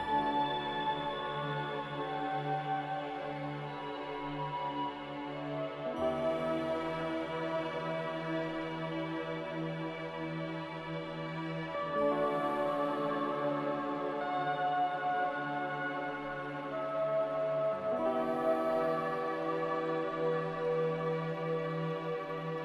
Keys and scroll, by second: 9.4 z, 13.2 a, 16.0 s, 20.1 z, 21.4-22.3 typing.